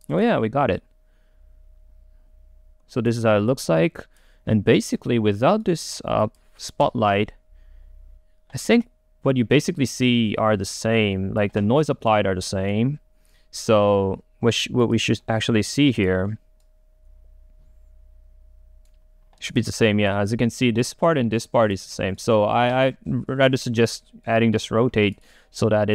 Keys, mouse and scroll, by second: 3.3 middle click, 3.7-4.9 drag, 4.9-6.3 right drag, 6.3 click, 6.9 Delete, 8.7-12.0 drag, 12.0-15.0 right drag, 15.0-16.3 drag, 16.3 middle click, 16.8-19.5 right drag, 19.5-24.6 drag.